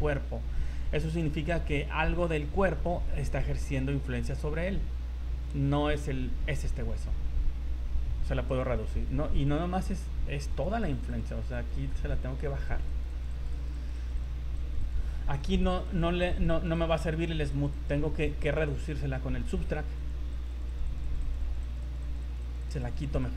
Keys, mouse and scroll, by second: 3.4 right click, 4.2 right click, 5.8 right click, 7.3-7.8 scroll up 6, 8.5 click, 10.6 click, 10.7 click, 10.9 click, 11.2 click, 11.4 click, 11.6 click, 11.8 click, 12.0 click, 12.2 scroll down 3, 12.4 click, 12.8 click, 13.0 click, 13.2 click, 13.4 click, 13.6 click, 13.8 click, 14.0 click, 14.2 click, 14.4 scroll down 2, 14.5 click, 14.8 click, 15.1 scroll up 4, 15.4 click, 15.6 click, 16.0 click, 16.2 click, 16.4 click, 16.6 click, 16.8 click, 17.4 click, 17.6 click, 17.8 click, 18.4 click, 20.3 click, 20.6 click, 20.8 click, 21.0 click, 21.3 click, 21.5 click, 21.7 click, 21.9 click, 22.1 click, 22.3 click, 22.5 click, 22.7 click, 22.9 click, 23.1 click, 23.3 click.